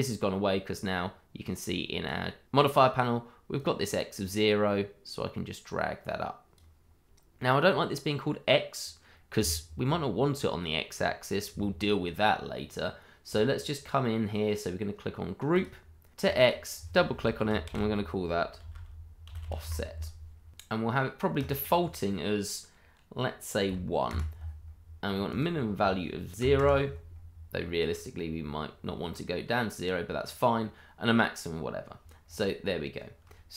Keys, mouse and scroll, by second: 1.6 click, 3.5 click, 13.2 click, 15.5 click, 16.4 double click, 17.6-19.6 typing, 20.5 click, 21.3 click, 23.6 1, 24.0 Return, 25.3 click, 26.4 0, 26.5 Return, 27.8-28.4 scroll down 1, 32.2-33.5 scroll up 1.